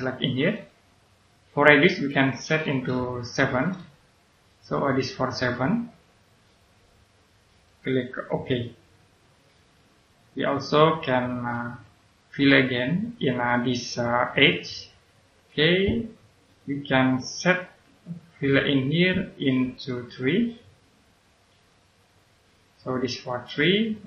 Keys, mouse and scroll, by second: 3.4 7, 4.1 click, 5.4 right click, 9.3 click, 10.7-11.8 scroll up 1, 14.5 click, 20.3 3, 21.5 click.